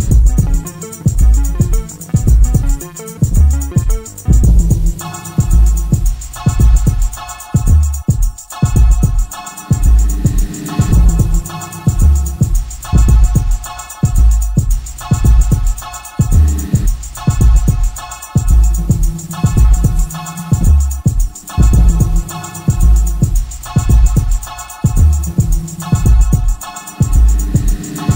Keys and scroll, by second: 7.4 F1, 9.7 F1, 9.9 F2, 15.7 F1, 15.9 F2, 23.2 F1, 23.3 F2, 24.8 ctrl+z.